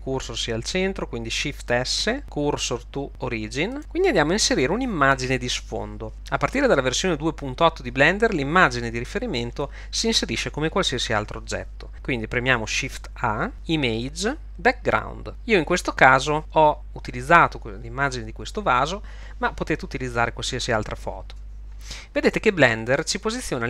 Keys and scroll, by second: 1.9 shift+s, 13.2 shift+a.